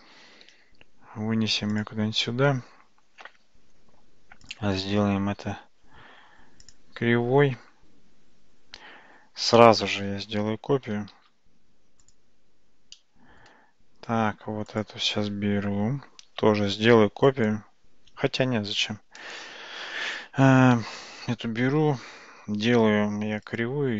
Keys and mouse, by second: 1.8 g, 4.4-6.8 right drag, 9.6 middle click, 11.2 shift+d, 13.0 middle click, 14.8 click, 16.6 shift+d, 18.3 ctrl+z, 23.5-23.9 drag.